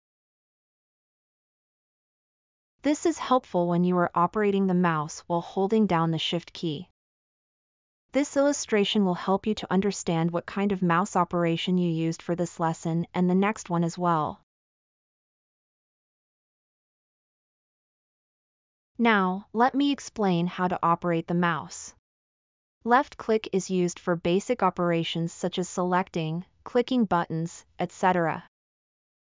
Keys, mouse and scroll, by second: 0.0-0.4 typing, 3.3-4.5 shift+drag, 9.3 shift+click.